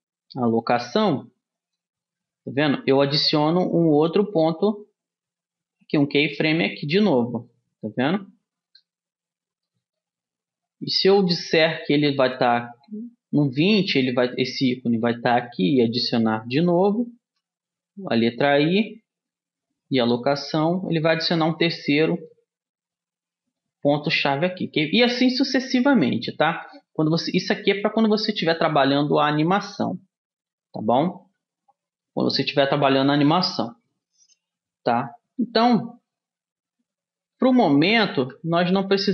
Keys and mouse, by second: 4.8-6.8 drag, 9.2-13.0 middle drag, 13.0 click, 13.1 middle click, 18.1 i, 24.0-26.0 drag, 26.5-28.5 drag, 29.6-32.6 middle drag, 37.2 ctrl+z, 37.8 ctrl+z, 38.1 ctrl+z, 38.5 ctrl+z, 39.0 ctrl+z.